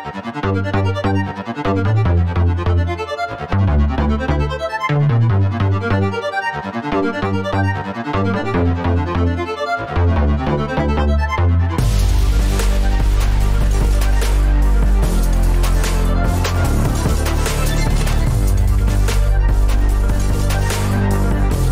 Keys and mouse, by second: 2.3 ctrl+r, 3.2 middle click, 3.7 shift+middle click, 20.7 ctrl+r.